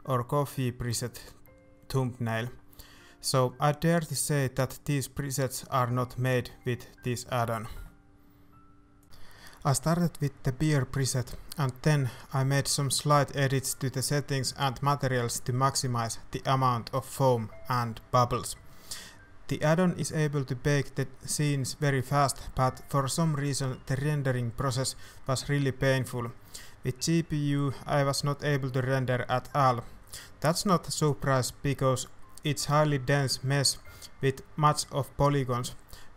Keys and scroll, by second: 8.4-8.9 typing, 9.3 ctrl+s, 27.7 alt+shift+a, 27.8 shift+z, 29.3 shift+z, 31.7 i, 35.4 ctrl+s, 36.1 shift+z.